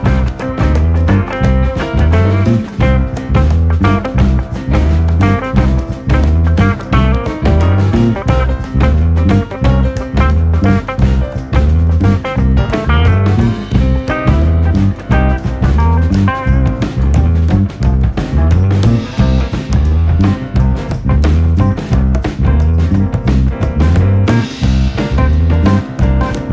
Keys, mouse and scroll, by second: 0.0-0.3 typing, 1.0 ctrl+r, 2.3 click, 3.7 ctrl+r, 4.5 g, 5.4 ctrl+r, 7.3 g, 7.5 click, 8.2 e, 9.0 r, 9.5 g, 10.6 alt+/, 10.7 scroll down 1, 10.8 middle click, 11.3 Tab, 11.4 click, 11.8-12.8 middle drag, 12.9 click, 13.3 KP_7, 13.4-14.3 scroll up 2, 13.8 Tab, 14.3 shift+middle click, 14.4 alt+/, 14.6 click, 14.8-16.0 drag, 16.0 scroll up 2, 16.2 shift+middle click, 16.5 2, 16.8 click, 17.1-18.4 drag, 18.4 s, 20.3 s, 21.3 click, 22.4-22.9 scroll down 2, 22.9 alt+/, 23.0 scroll down 1, 23.1 middle click, 23.6 Tab, 23.7 click, 24.9 KP_3, 25.1-25.7 scroll up 4, 25.7 shift+middle click, 26.3-26.5 drag.